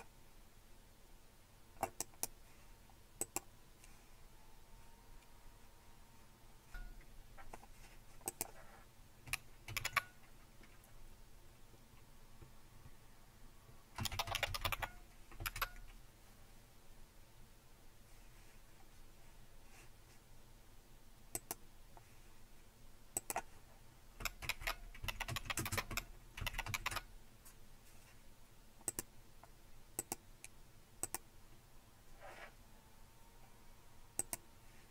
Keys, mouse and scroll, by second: 2.0-3.2 right drag, 3.2-4.7 drag, 6.7 Return, 6.7 typing, 8.3-9.9 drag, 9.7 super+d, 13.8-15.2 typing, 15.4 Return, 21.3-22.6 drag, 23.2-24.2 drag, 24.4-26.7 typing, 29.1-32.9 drag, 34.2 click.